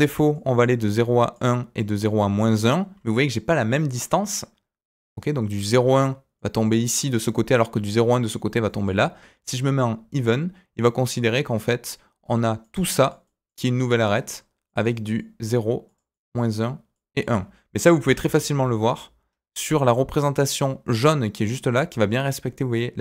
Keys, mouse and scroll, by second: 0.0-18.0 typing, 0.3 click, 0.9 click, 2.0 click, 2.3 click, 6.3 click, 8.6 click, 12.6 click, 13.2 click, 14.0 click, 14.6 click, 15.1 click, 15.8 click, 16.1 click, 16.9 click.